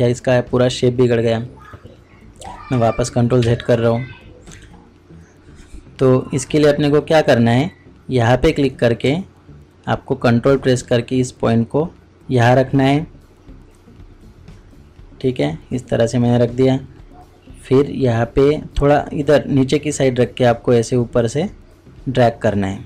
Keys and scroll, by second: 3.4 ctrl+z, 9.0 ctrl+z.